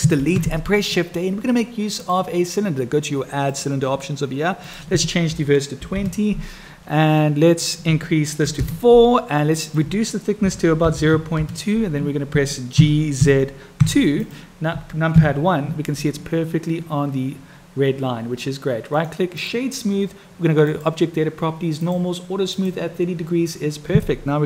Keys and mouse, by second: 0.2 shift+a, 3.5 click, 4.6-6.8 drag, 7.6-9.4 drag, 9.6-12.0 drag, 15.0 KP_1, 19.1 click, 20.6 click, 21.7 click, 22.4 click.